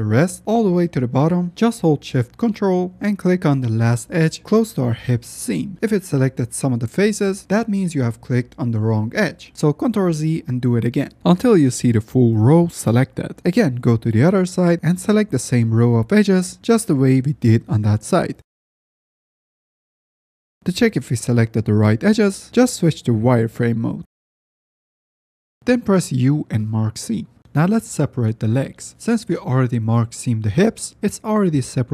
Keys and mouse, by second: 0.2 middle click, 4.7 ctrl+shift+click, 9.5 ctrl+z, 10.7 ctrl+shift+click, 11.1-13.1 ctrl+shift+middle drag, 13.4 middle click, 13.4 z, 15.1 alt+shift+click, 15.1 ctrl+z, 15.6 shift+click, 15.7 shift+middle click, 16.6 shift+middle click, 18.6 ctrl+z, 19.6 ctrl+shift+click, 20.8 drag, 21.1-21.5 middle drag, 21.8 alt+click, 22.0 z, 22.4-23.1 alt+middle drag, 23.4-24.9 middle drag, 25.9 u, 27.1 shift+middle drag, 27.8-28.3 middle drag, 28.5 z, 29.2 shift+middle click.